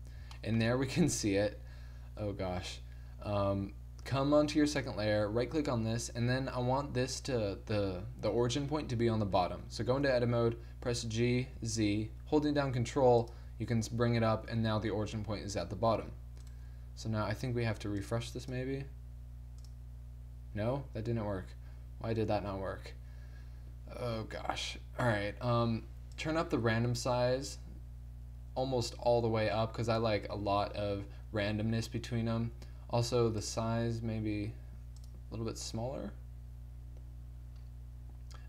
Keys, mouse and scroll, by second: 0.6 middle click, 3.1 middle click, 4.1 2, 9.5 Tab, 10.8 g, 14.0 Tab, 15.9 1, 24.2-28.2 middle drag, 24.2 scroll up 1, 33.5 click, 37.3 middle click, 37.6-38.4 middle drag.